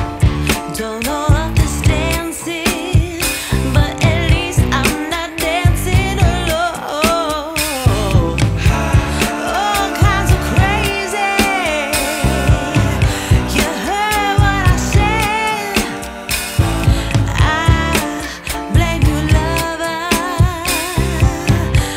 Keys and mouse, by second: 2.9 j, 3.5 click, 7.8 click, 14.4 click, 14.9 ], 15.2 click, 16.2 ], 17.3-19.1 typing, 17.5 click.